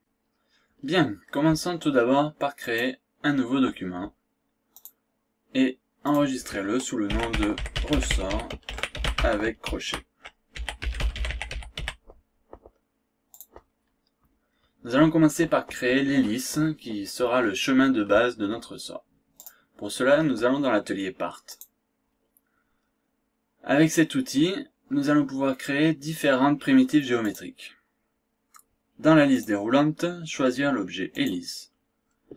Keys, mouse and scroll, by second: 2.6 click, 4.7 click, 6.0 click, 6.9-12.3 typing, 13.4 click, 19.4 click, 21.4 click, 27.2 click, 29.3 click, 31.2 click.